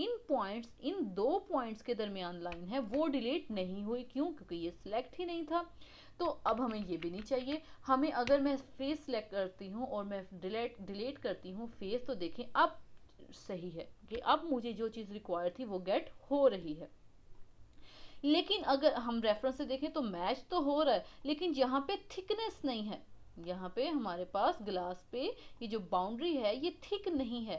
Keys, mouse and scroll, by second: 1.2 click, 2.7-5.7 shift+drag, 6.5 ctrl+z, 6.8 ctrl+z, 8.3 x, 14.1 Tab, 15.1-19.0 middle drag, 25.5-26.9 middle drag, 26.9-27.3 scroll up 1, 27.3 shift+middle click.